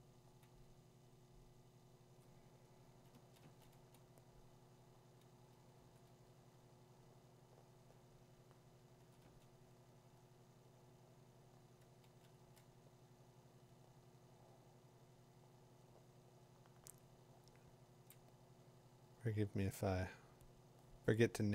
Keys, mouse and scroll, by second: 1.6 click, 2.1 click, 6.1 [, 6.1 ], 9.0 ], 9.2 ], 12.0 [, 12.4 [.